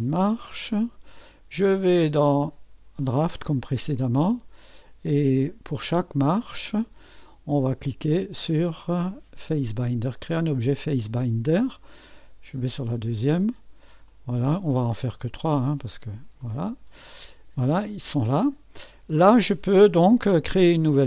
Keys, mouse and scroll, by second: 0.0-2.9 drag, 3.0-4.8 drag, 5.7-9.4 drag, 11.1 click, 12.6 click, 14.1 click, 15.3 click, 16.4 click, 17.1-18.8 scroll down 1.